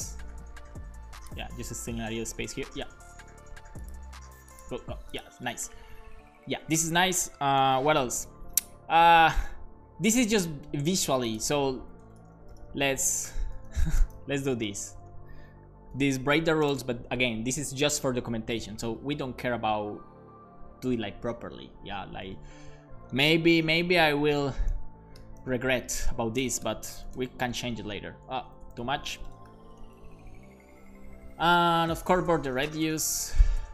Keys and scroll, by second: 7.5 alt+shift+f, 7.9 super+s, 12.0-14.6 typing, 15.9 o, 16.3 shift+;, 16.6 space, 23.6-26.6 typing, 26.4 super+s, 27.1 super+s, 28.7 Left, 29.1 BackSpace, 29.8 super+s, 31.4 Right, 31.8 Up, 32.1 super+Right, 32.3 Return, 32.7 b, 33.0 o.